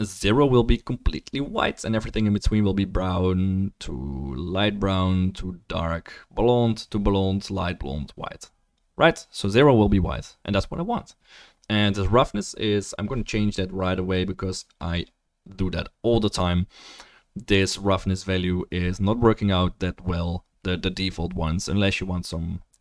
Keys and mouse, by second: 0.2-1.9 drag.